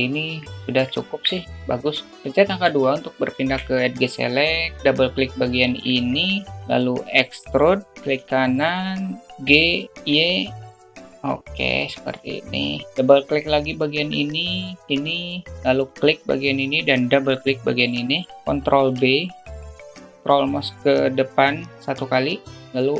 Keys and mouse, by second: 0.3 middle click, 1.5 alt+middle click, 2.7 2, 3.5 middle click, 5.3 click, 6.5 alt+shift+middle click, 7.7 e, 9.9 g, 14.2 click, 14.4 click, 15.1 shift+click, 16.3 shift+click, 17.8 shift+click, 19.4 ctrl+b.